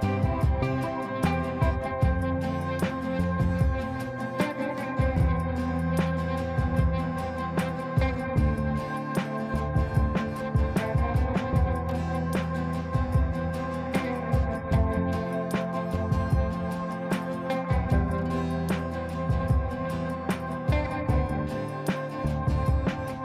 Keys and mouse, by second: 0.3 F3, 1.4-3.0 drag, 6.2 shift+F2, 6.7 right click, 7.1 click.